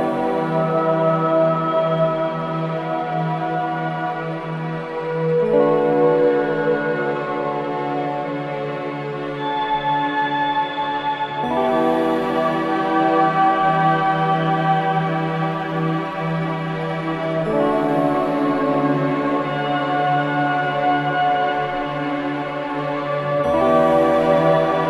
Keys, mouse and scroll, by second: 9.1 scroll down 1, 10.3-11.6 drag, 11.4-12.2 typing, 13.4 click, 14.2-15.7 typing, 17.0 click, 20.1 scroll up 1, 21.3 scroll down 1, 22.6 scroll up 1.